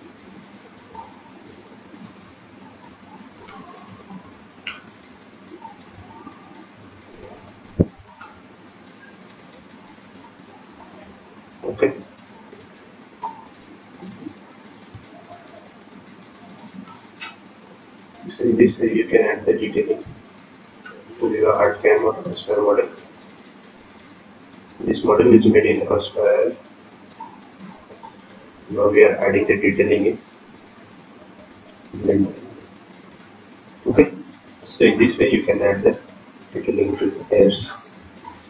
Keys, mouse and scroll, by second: 1.7-2.9 scroll down 4, 2.9-3.5 scroll down 2, 5.1 click, 11.1 KP_0, 11.1 KP_Decimal, 11.6 KP_2, 11.6 KP_1, 12.0 click, 14.2 click, 17.5 ctrl+click, 23.4 ctrl+click, 26.9 ctrl+click, 30.6 scroll down 1, 32.5 shift+click, 36.5 shift+click, 37.2 scroll down 8, 38.3-38.4 scroll up 1.